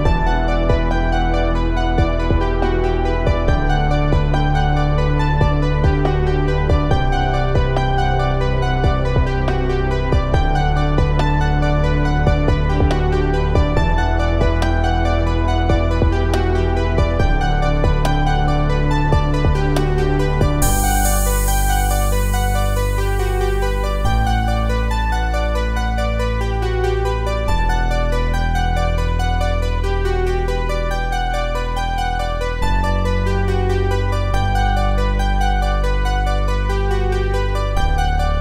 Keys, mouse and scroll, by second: 2.1-4.9 drag, 9.2-12.1 middle drag, 12.1 click, 21.5 click, 31.9 click, 36.5 click.